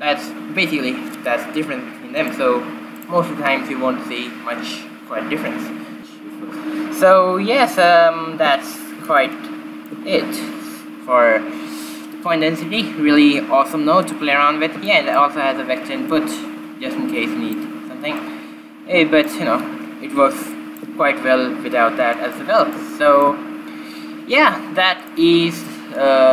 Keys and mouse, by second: 3.4-5.2 drag, 9.6 shift+z, 10.3-12.2 middle drag, 16.1-17.9 middle drag, 17.9-19.3 drag, 19.5-21.3 drag, 21.8-26.0 middle drag.